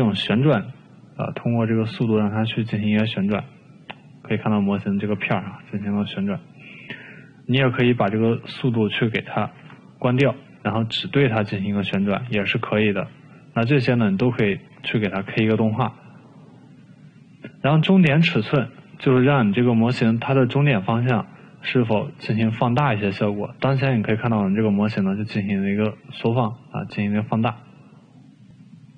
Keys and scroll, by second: 6.5 ctrl+z, 10.3 0, 10.6 Return.